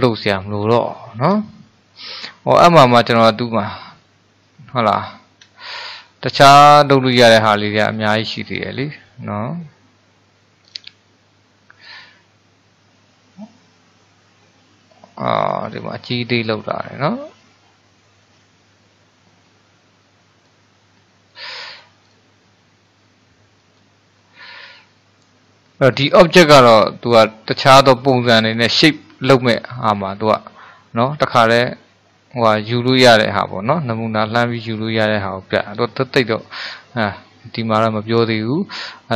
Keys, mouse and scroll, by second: 0.7-1.5 scroll up 1, 1.5-3.1 shift+middle drag, 3.1 click, 5.0 scroll down 3, 5.6-9.2 shift+middle drag, 10.7 click, 11.9-15.0 drag, 22.1 click, 23.6 click, 26.0 click.